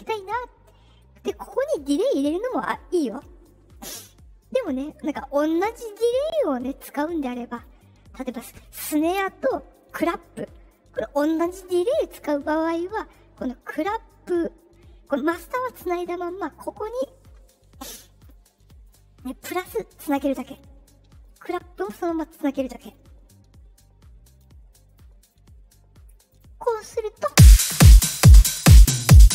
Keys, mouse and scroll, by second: 1.6 click, 3.7 click, 7.4 click, 8.6 click, 9.7 click, 12.1 click, 16.9 click, 18.1 click, 18.8 click, 20.0 click, 21.4 click, 24.2 click, 24.8 click, 25.2 click, 26.2 click, 27.2 space.